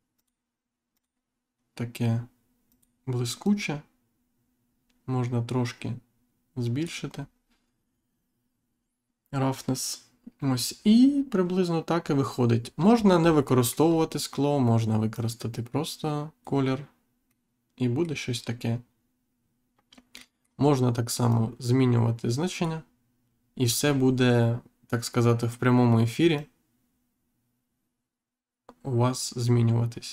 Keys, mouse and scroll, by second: 0.1 click, 0.9 click, 2.6 click, 3.4 click, 12.7-13.3 scroll down 2, 13.4 middle click, 13.8-14.2 scroll up 1, 15.1 click, 17.2 middle click, 20.1 middle click, 20.4 scroll down 1, 20.5 scroll up 1, 21.2 click, 26.3 click.